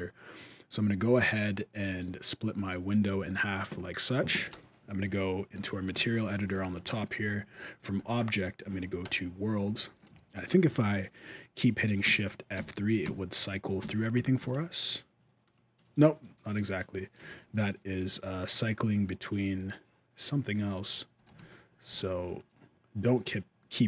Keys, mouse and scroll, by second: 1.0 click, 4.3 shift+space, 5.7 shift+F3, 6.6 middle click, 7.7 click, 9.5-10.2 scroll up 7, 10.2 shift+middle click, 11.8 shift+F3, 12.3 shift+F3, 12.8 shift+F3, 13.6 shift+F3, 13.9 shift+F3, 14.2 shift+F3, 17.1 shift+F3, 17.8 click, 20.9 click, 21.1 shift+F3, 21.7 shift+F3.